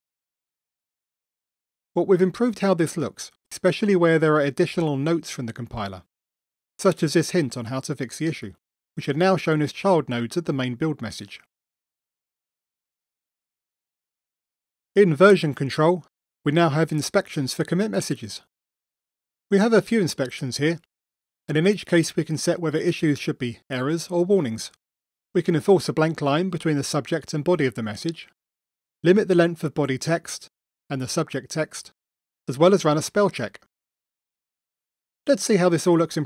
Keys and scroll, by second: 4.4 super+0, 7.9 super+Down, 11.6 super+0, 12.5 super+Down.